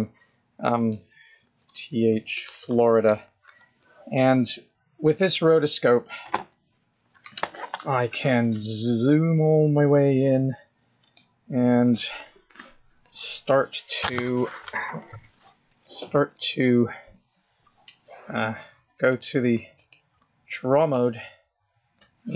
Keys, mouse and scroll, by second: 11.0-11.9 scroll up 11, 13.0 shift+middle click, 21.7 click.